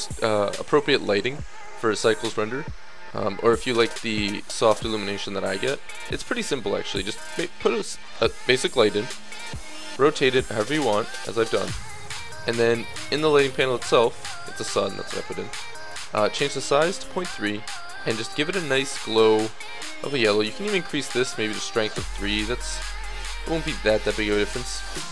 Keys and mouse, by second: 2.4-4.1 middle drag, 4.9-7.5 middle drag, 7.9-12.8 middle drag, 12.8-23.6 drag, 23.6 middle click.